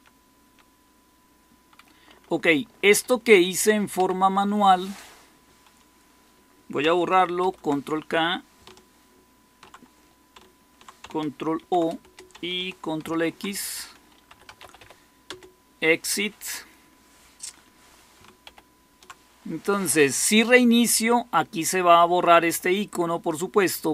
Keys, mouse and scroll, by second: 0.0-0.3 typing, 1.9-4.4 typing, 7.3 ctrl+k, 11.5 ctrl+o, 11.9 Return, 13.0 ctrl+x, 14.0-15.2 typing, 18.4 ctrl+-.